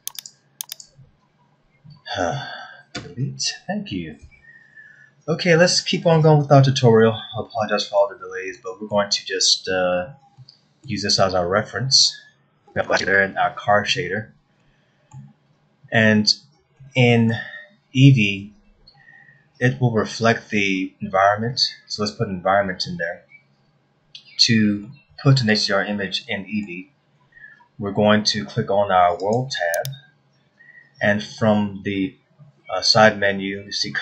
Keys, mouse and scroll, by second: 0.1 shift+click, 0.6 shift+click, 2.9 Delete, 4.1-4.8 scroll up 1, 4.8-5.4 scroll up 1, 7.1 shift+middle click, 8.2-8.5 scroll up 2, 8.5 middle click, 9.1-10.1 scroll down 3, 10.3 middle click, 12.9 scroll up 1, 13.7 scroll up 1, 15.3 middle click, 16.1-16.8 scroll up 3, 16.9 scroll down 1, 17.4 middle click, 25.5 shift+middle click, 26.9 middle click, 29.8 click.